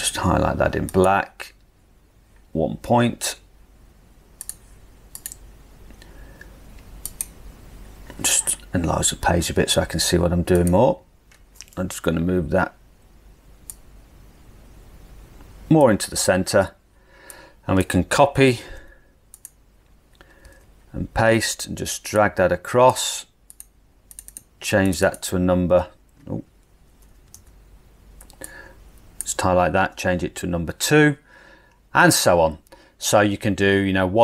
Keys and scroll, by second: 8.6 super+=, 8.9 super+=, 9.2 super+=, 12.0 Left, 18.6 super+c, 20.7 super+v, 27.4 super+z, 29.9 2.